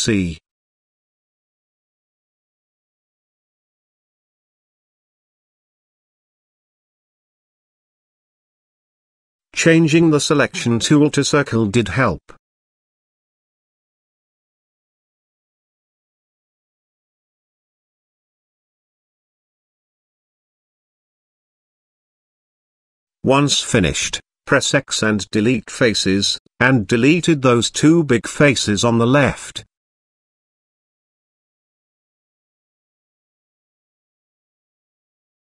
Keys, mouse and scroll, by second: 0.7 click, 3.6-4.8 shift+drag, 5.5 shift+click, 6.9 shift+click, 7.9 shift+click, 9.7-10.9 drag, 11.8-13.9 shift+drag, 15.0 ctrl+click, 17.1 shift+click, 18.1-21.1 ctrl+drag, 22.0 shift+click, 23.8 x, 26.4-28.0 drag, 28.3 x, 30.0 click, 30.4 x, 31.8 shift+middle click, 32.7 click, 33.4 x, 34.6-35.3 middle drag.